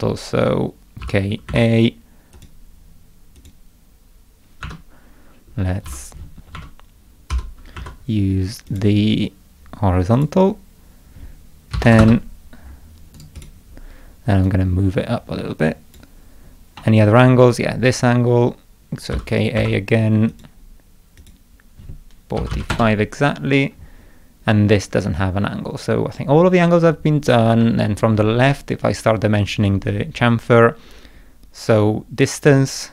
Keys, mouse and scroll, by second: 1.0 k, 1.5 a, 2.3 click, 3.4 click, 4.6 Escape, 5.9 l, 6.5 Escape, 7.3 k, 7.8 a, 8.7 click, 10.2 click, 13.2 right click, 13.4 click, 14.5-16.0 drag, 16.8 middle click, 19.1 k, 19.6 a, 20.3 click, 21.2 click, 27.6 middle click.